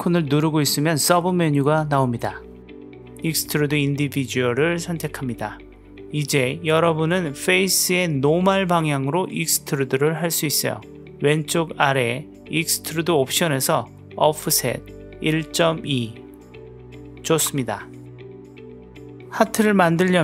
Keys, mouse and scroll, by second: 7.4-9.0 drag, 13.1-14.8 drag, 16.1-17.7 drag, 19.0 w, 19.7 a.